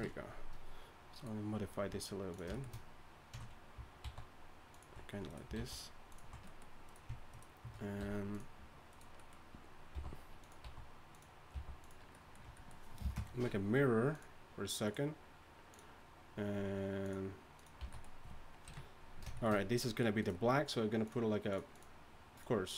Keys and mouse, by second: 1.8 s, 4.0 alt+s, 5.6 alt+s, 8.0 w, 9.9 g, 10.6 s, 11.5 g, 12.5 Tab, 13.0 space, 17.8 a, 18.7 KP_1.